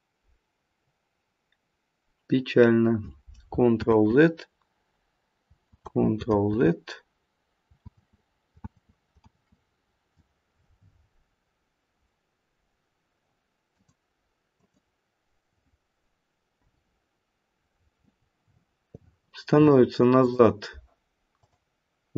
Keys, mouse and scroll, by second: 0.7-1.5 scroll down 1, 1.5-3.4 scroll down 1, 3.8 ctrl+z, 5.7 ctrl+z, 7.8 ctrl+z, 8.6 ctrl+z, 9.2 ctrl+z, 11.1-11.8 scroll up 1, 12.1 scroll up 2, 13.7 click, 14.5 click, 16.5 Delete, 18.1-18.5 scroll down 2, 20.2 click.